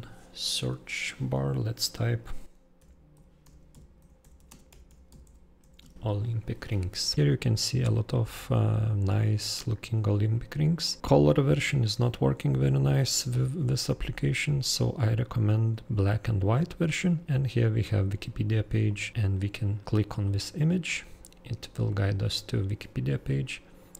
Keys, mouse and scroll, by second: 2.8 super+o, 3.1 super+l, 3.4 super+p, 3.7 super+p, 4.2 super+i, 4.3 super+c, 4.4 super+space, 4.6 super+r, 4.8 super+i, 5.0 super+n, 5.2 super+g, 5.6 super+s, 5.7 super+Return, 10.1 super+scroll down 2, 10.8 super+scroll up 3, 14.9-16.2 super+scroll down 8, 17.9 super+scroll, 18.8 super+click, 20.2 super+click.